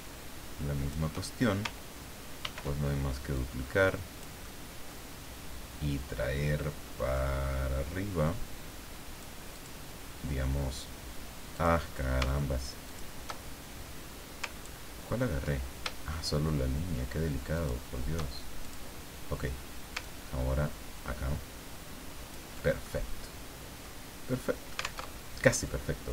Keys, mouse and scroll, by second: 2.4 ctrl+d, 3.3-4.5 drag, 4.5 middle click, 7.1-9.4 drag, 9.5 click, 11.5 click, 12.8 shift+click, 14.6 ctrl+scroll up 2, 17.5 shift+click, 18.6 shift+click, 20.0-22.5 ctrl+drag, 22.9-24.1 ctrl+middle drag, 25.0 alt+Tab.